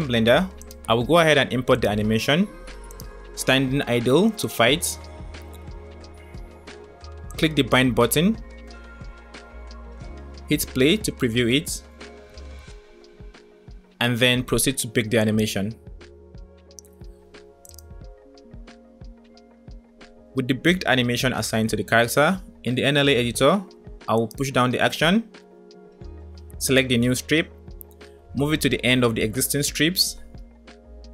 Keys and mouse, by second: 0.9 click, 1.9 click, 7.4 click, 10.9 space, 13.3 space, 15.4-19.3 drag, 24.1 click, 26.8 click, 28.1 g.